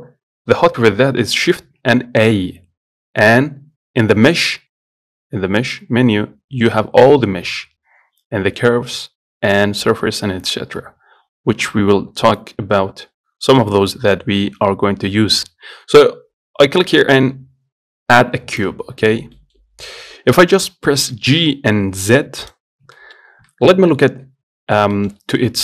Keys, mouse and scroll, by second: 1.8 shift+a, 19.2-19.6 scroll down 2, 19.6-21.2 middle drag, 21.2 g, 22.9 scroll up 2, 23.2 shift+middle click, 24.0-25.2 scroll up 2, 25.2-25.6 shift+middle drag.